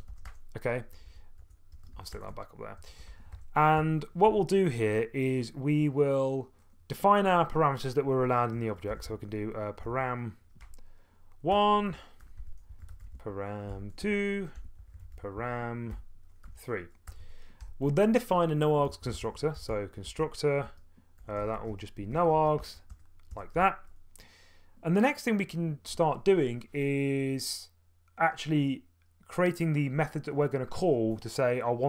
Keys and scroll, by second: 0.0-1.9 typing, 2.1 Return, 2.8 Return, 3.1 }, 3.3 Up, 4.3 Tab, 8.6-10.6 typing, 11.5 Return, 11.7-23.5 typing, 17.1 Return, 17.6 Tab.